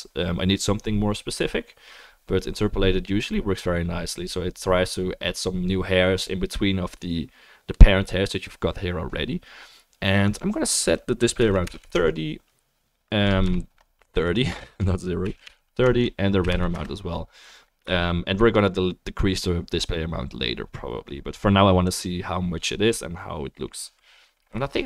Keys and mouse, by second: 10.4-23.0 drag.